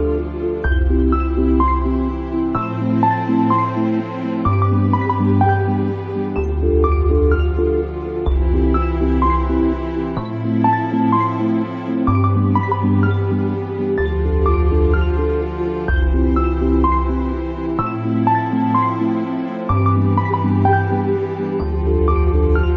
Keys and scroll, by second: 9.8 ctrl+z.